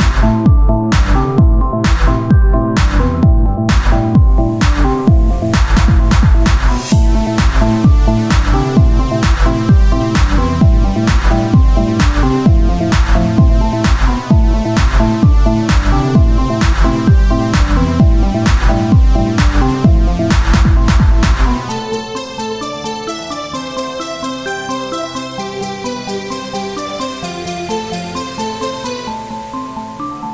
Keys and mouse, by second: 3.3-5.5 drag, 5.9-7.0 drag, 7.1 click, 7.9 Tab, 9.5 KP_1, 10.3 z, 13.1 Tab, 17.4 Tab, 18.8 right click, 19.9-22.9 drag, 19.9-21.6 right drag, 21.6 Tab, 22.9 KP_1, 26.4-29.6 z.